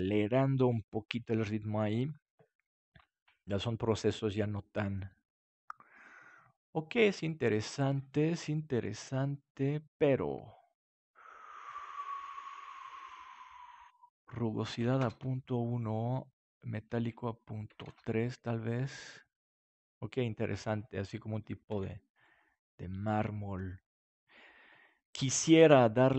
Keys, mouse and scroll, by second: 14.5-18.1 drag, 21.8 ctrl+s.